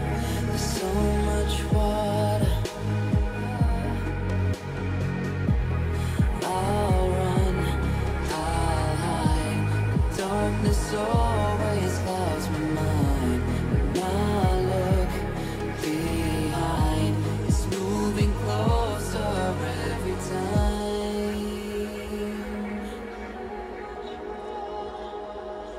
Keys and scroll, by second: 5.2 ctrl+alt+shift+e, 8.1 s, 12.4 Return, 12.5 [, 13.9 ctrl+z, 18.9 Return.